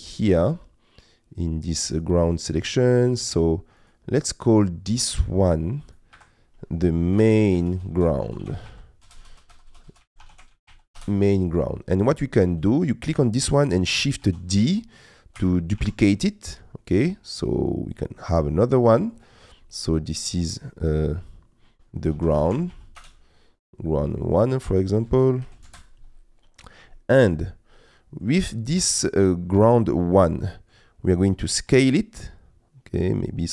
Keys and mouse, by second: 3.8-5.9 drag, 6.1 F2, 9.2 BackSpace, 9.3 BackSpace, 9.7 BackSpace, 12.0 click, 14.3 shift+d, 15.4 g, 15.8 shift+z, 19.2-20.2 drag, 24.2 click, 24.3-25.7 drag, 26.5 middle click, 26.9 shift+middle click, 27.8 middle click, 28.9 middle click, 29.7 middle click, 30.4 middle click, 31.8 s.